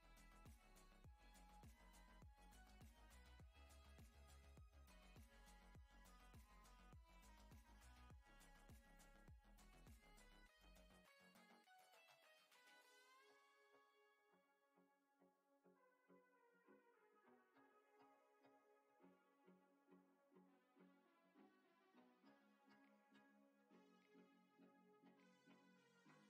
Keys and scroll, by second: 0.0-1.3 typing, 23.9 ctrl+z.